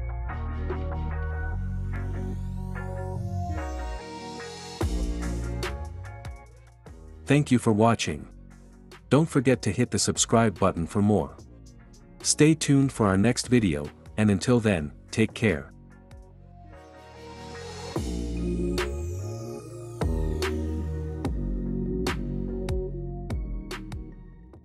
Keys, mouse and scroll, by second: 0.2-2.1 drag, 2.8-4.1 drag, 4.1 space, 7.0 space.